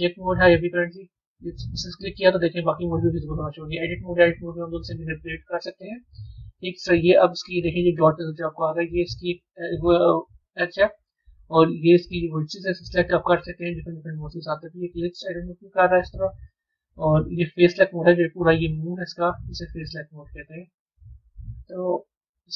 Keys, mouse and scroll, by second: 0.9 click, 2.7-4.4 drag, 5.6-7.5 middle drag, 7.5 scroll up 2, 8.6 click, 10.6-12.8 middle drag, 12.8 click, 15.1-17.7 middle drag, 17.7 click, 18.5 click, 19.1-22.5 middle drag.